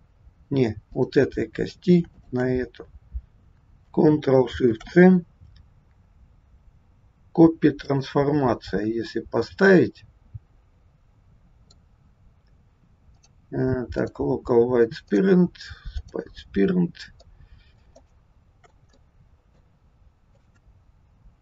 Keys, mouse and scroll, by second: 1.0 click, 2.1 shift+click, 4.6 ctrl+shift+c, 9.5 middle click, 13.1 click, 15.1 click, 17.2 middle click, 18.1 shift+middle click, 18.8 middle click, 18.8 scroll up 1, 20.3 click, 21.1 scroll down 2.